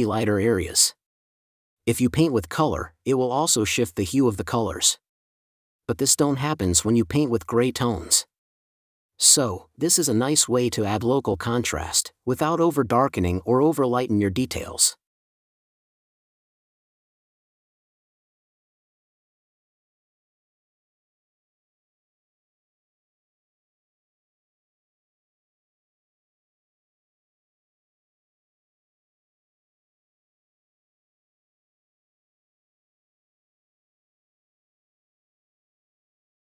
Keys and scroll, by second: 1.0 space, 3.1 super+z, 3.2 super+z, 4.7 4, 7.7 space, 9.5 4, 10.3 super+z, 14.3 space, 17.7 space, 19.3 space, 21.0 space, 23.2 super+space, 24.2 n, 24.8 space, 27.2 super+space, 28.1 space, 31.1 4, 32.0 super+space, 33.1 space, 33.8 space, 35.1 space.